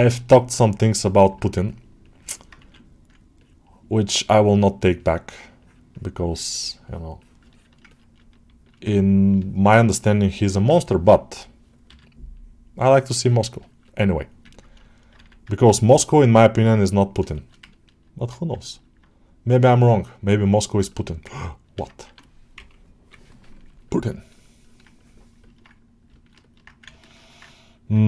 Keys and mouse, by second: 0.0 alt+middle click, 0.6 click, 1.2 alt+middle click, 2.2 middle click, 3.2-4.4 ctrl+drag, 5.5-7.3 drag, 7.4 shift+middle click, 7.8 ctrl+alt+middle click, 8.5 ctrl+alt+middle click, 9.2 ctrl+alt+middle click, 10.1 alt+middle click, 11.1-12.8 drag, 13.2 shift+click, 13.5 shift+middle click, 13.7 alt+middle click, 14.4 ctrl+alt+middle click, 14.7 alt+shift+middle click, 15.3 alt+1, 15.4 alt+middle click, 15.8-17.1 drag, 17.2 alt+shift+middle click, 17.6 ctrl+middle click, 18.6 alt+shift+middle click, 19.5 click, 20.2 click, 20.7 alt+middle click, 21.2 ctrl+alt+middle click, 23.7 ctrl+click, 24.1 ctrl+click, 25.3 middle click, 26.0 ctrl+alt+middle click, 26.3 alt+middle click, 26.8 ctrl+middle click, 27.1 alt+middle click, 27.5 ctrl+click, 27.9 alt+middle click.